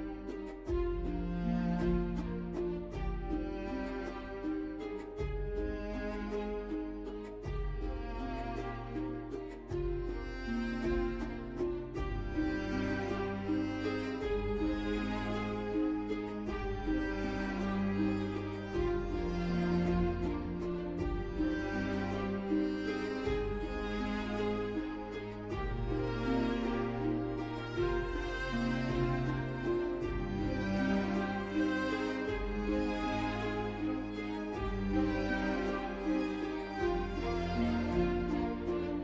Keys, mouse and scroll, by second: 0.4 ctrl+z, 2.1 1, 3.0 0, 3.3 Return, 10.6 typing, 17.7 ctrl+z.